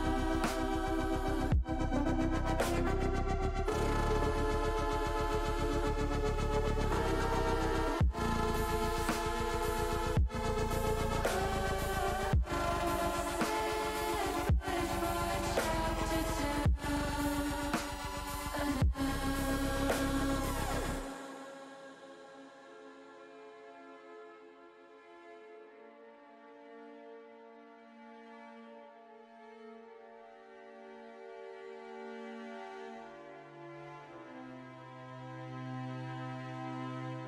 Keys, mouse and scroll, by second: 2.3 middle click, 3.4 middle click, 7.8 click, 9.1 alt+shift+click, 10.0 alt+shift+click, 11.4 ctrl+z, 11.9 middle click, 12.9 middle click, 13.4 middle click, 15.1 shift+click, 16.6 shift+click, 17.7 middle click, 18.5 shift+click, 19.2 shift+click, 19.7 shift+click, 20.6 shift+middle click, 21.8 ctrl+click, 22.5 middle click, 23.9 ctrl+click, 24.7 shift+middle click, 25.2 middle click, 26.9 middle click, 28.3 u, 31.5 middle click, 32.4 middle click, 34.2 middle click, 35.9 click, 36.6 click.